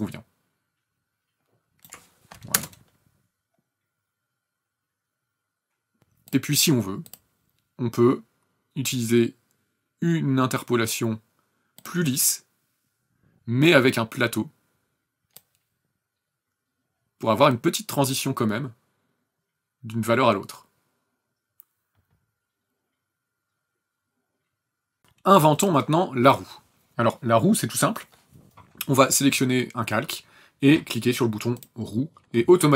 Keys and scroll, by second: 2.6 ctrl+KP_0.